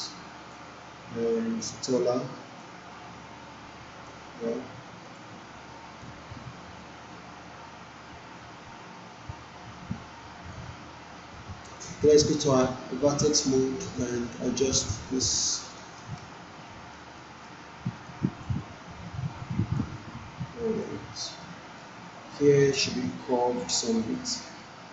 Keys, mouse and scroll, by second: 11.7 right click, 11.9-13.6 right drag, 13.8-14.7 scroll up 1, 15.1-15.7 alt+scroll down 1, 15.7 alt+middle click, 16.1-16.9 scroll up 1, 17.1 alt+middle click, 18.1-18.7 drag, 19.7-21.0 drag, 21.4-22.0 alt+middle drag.